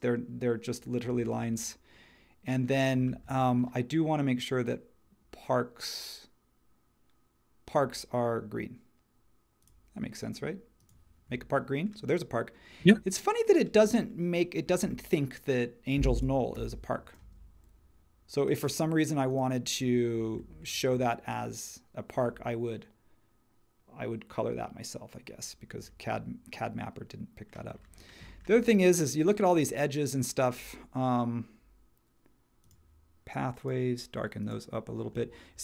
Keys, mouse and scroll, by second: 16.5 h, 17.2 space.